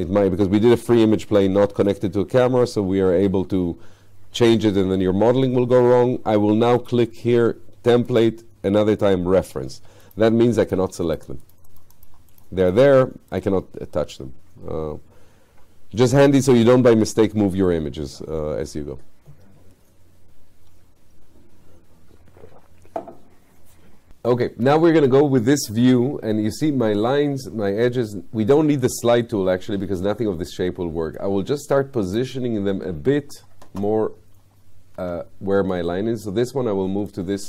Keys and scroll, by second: 35.0 w.